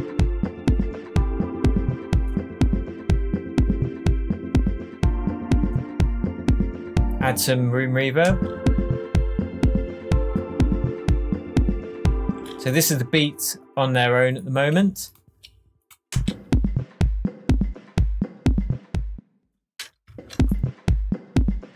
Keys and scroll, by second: 7.2 space, 12.2 space, 16.0 shift+space, 20.1 super+z.